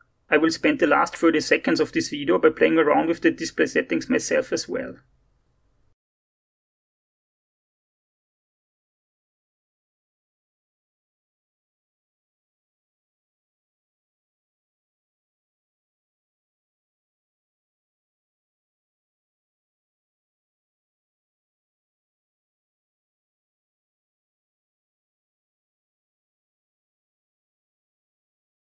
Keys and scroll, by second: 6.5 BackSpace, 7.8 BackSpace, 9.2 0, 9.8 ctrl+c, 10.4 ctrl+v, 10.6 Left, 10.9 0, 15.3 0, 24.3 0.